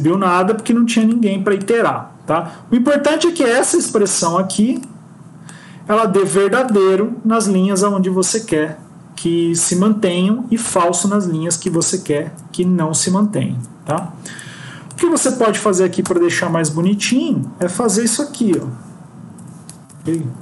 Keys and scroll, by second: 12.2 ctrl+z, 16.7 End, 17.1 Left, 18.4 BackSpace, 19.2 Up, 19.6 End, 20.1 Left.